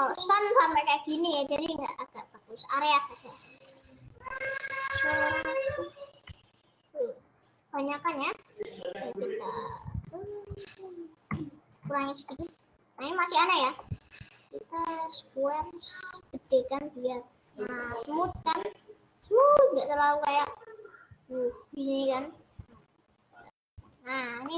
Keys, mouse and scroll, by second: 0.0 click, 0.9-2.4 middle drag, 2.4 click, 6.5 0, 12.7 middle click, 13.2-13.7 scroll down 2, 13.7-15.5 middle drag, 15.5-18.4 drag, 18.4-19.5 scroll up 4, 19.5-20.8 middle drag, 20.8-23.5 drag.